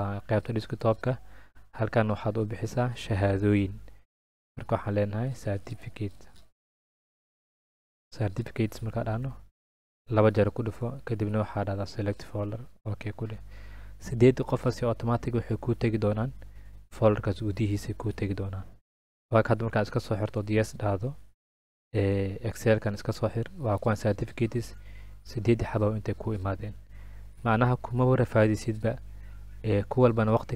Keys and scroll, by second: 4.4-5.5 typing, 6.8-8.8 typing, 9.1 Return.